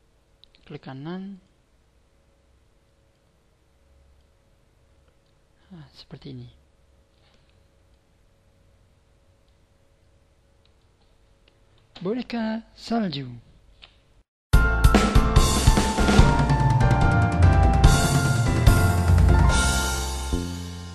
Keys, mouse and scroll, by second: 0.4 right click, 1.3 click, 3.1 click, 4.8-5.3 scroll up 4, 5.3 middle click, 7.4-8.0 scroll down 4, 7.8 middle click, 9.7-10.4 scroll up 1, 10.4 scroll down 1, 10.8 middle click.